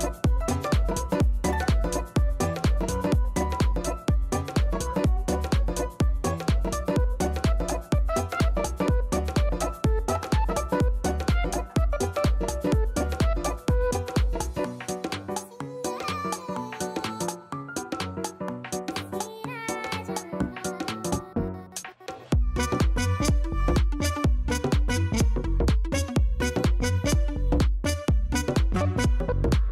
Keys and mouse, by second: 3.9 click, 6.6 right click, 11.2 click, 15.6 click, 16.9 click, 17.6 click, 17.8 click, 20.1 alt+click, 20.6 alt+click, 20.8 alt+middle click, 21.2-23.4 alt+drag, 23.5 alt+click, 24.3 alt+shift+click, 26.5 click, 27.2 click, 28.0 click, 28.4 click, 28.6 click, 29.4 click.